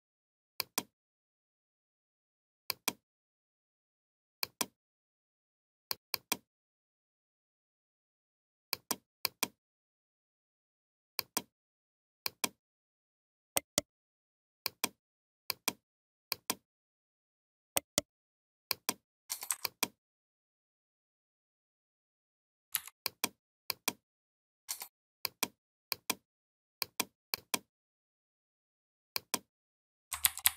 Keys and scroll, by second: 22.6 v, 30.1 ctrl+[.